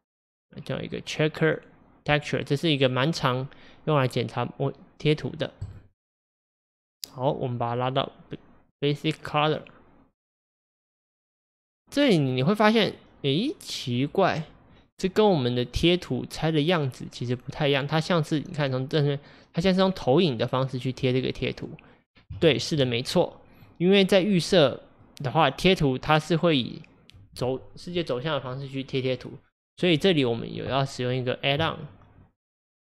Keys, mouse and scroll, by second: 11.6-16.2 middle drag, 21.5-32.8 middle drag.